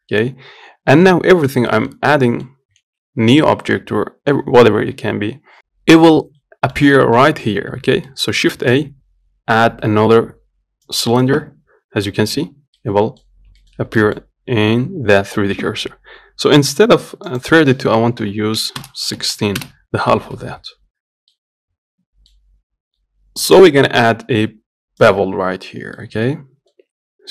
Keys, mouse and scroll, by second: 1.6-2.0 scroll down 1, 2.0 middle click, 2.2-2.5 scroll up 1, 2.5 middle click, 3.1 shift+a, 6.7-8.8 middle drag, 8.8 shift+a, 13.0 middle click, 13.6 scroll up 1, 13.9-17.6 shift+middle drag, 17.6-20.4 drag, 21.6-23.7 middle drag, 25.4 click, 26.2-27.3 middle drag.